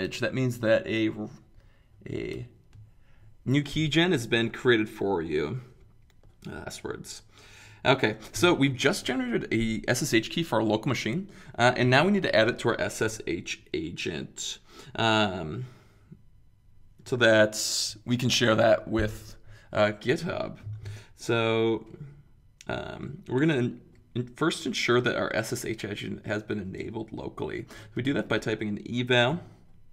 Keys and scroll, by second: 27.5-28.7 typing.